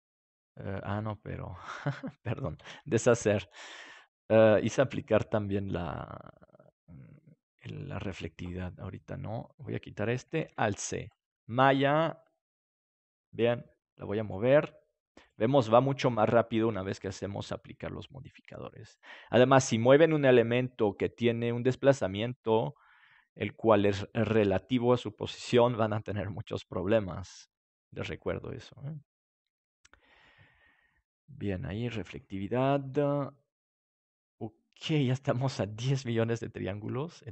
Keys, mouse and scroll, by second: 5.3 ctrl+z, 5.7-7.5 middle drag, 7.5-9.1 drag, 10.4 alt+c, 13.9 g, 15.3-20.7 drag, 27.8-34.5 drag.